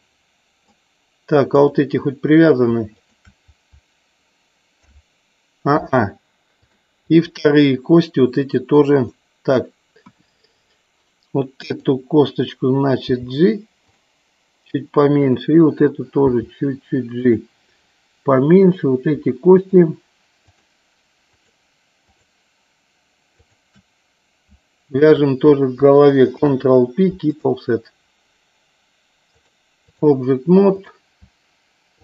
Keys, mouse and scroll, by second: 1.8 click, 3.0 shift+click, 4.9 ctrl+p, 6.6 click, 9.1 middle click, 10.1 KP_1, 11.9 click, 13.1 g, 14.0 click, 15.4 click, 16.4 g, 17.2 click, 18.9 click, 19.7 shift+click, 20.5 shift+click, 23.5 shift+click, 25.0 shift+click, 26.4 ctrl+p, 29.6 click, 30.9 click.